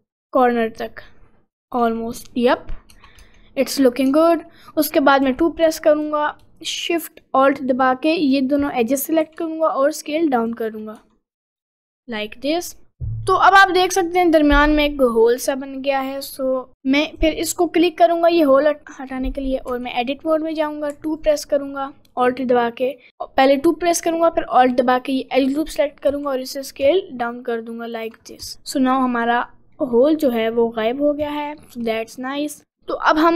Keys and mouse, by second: 2.0 middle click, 3.2 Tab, 4.1 Tab, 5.2 2, 6.4 shift+a, 9.3 s, 11.0 Tab, 11.7-12.8 middle drag, 13.3 middle click, 14.0 middle click, 19.7 Tab, 21.3 click, 26.1 s, 28.5 Tab, 29.2 middle click, 29.8 middle click, 30.3 middle click.